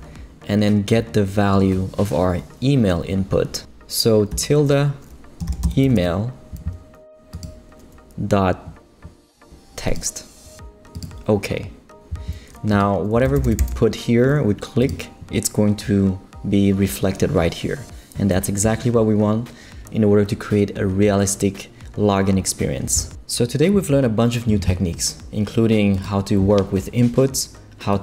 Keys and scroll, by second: 5.2-6.3 typing, 12.9-14.1 typing.